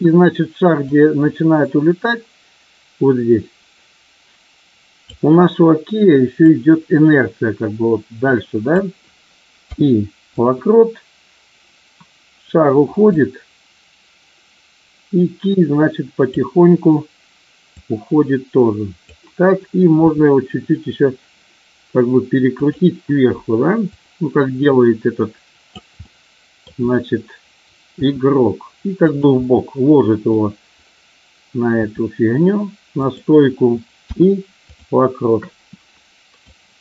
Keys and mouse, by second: 0.8-5.0 drag, 6.5-8.7 drag, 13.2-16.3 drag, 17.8-19.1 drag, 20.1 r, 24.0-25.7 drag, 26.0-26.6 middle drag, 28.0 r, 29.5-30.2 middle drag, 31.7 r, 33.0 click, 36.5-36.8 drag.